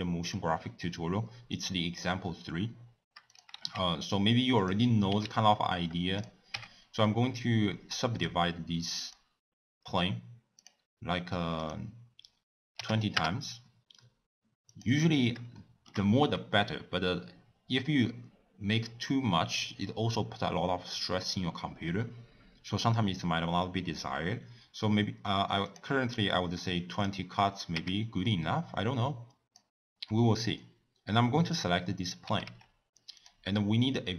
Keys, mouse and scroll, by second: 1.5-3.4 drag, 3.5 shift+a, 5.1 s, 6.5 Tab, 8.1-10.6 right drag, 10.6 click, 11.6-14.9 drag, 15.6 shift+middle click, 16.1-16.9 scroll down 3, 25.7 click, 26.9 click, 27.7 Tab, 29.1-30.1 drag, 30.1-31.5 middle drag, 31.5 click, 32.3 g.